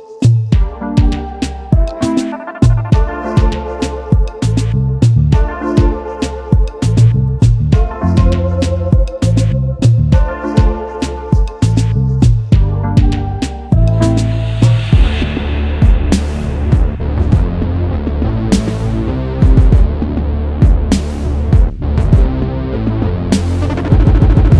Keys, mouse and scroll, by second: 2.1 typing, 3.7-4.0 alt+scroll down 1, 4.4-5.6 alt+scroll up 1, 10.0 alt+scroll up 1, 10.8 space, 14.5-15.0 alt+scroll up 1, 15.5 space, 19.7 alt+scroll up 1, 22.2 scroll down 1, 22.9-23.3 scroll down 1, 23.3 scroll up 1, 23.6 scroll down 1, 23.8 scroll up 1, 24.0 scroll down 1, 24.3 scroll up 1, 24.4 scroll down 1.